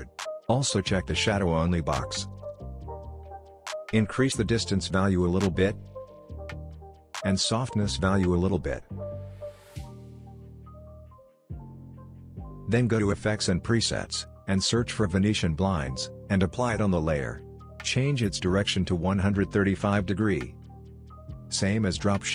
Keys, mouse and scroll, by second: 4.6-7.7 drag, 14.7-15.8 typing, 16.7 click, 21.8 Return.